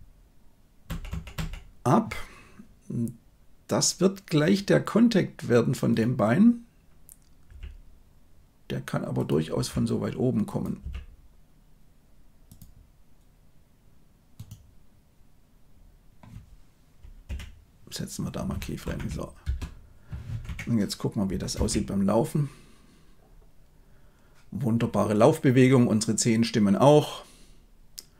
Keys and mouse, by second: 0.7 Right, 1.0 Right, 1.2 Right, 9.5 r, 10.7 g, 18.7 shift+Left, 19.4 space, 21.4 shift+space.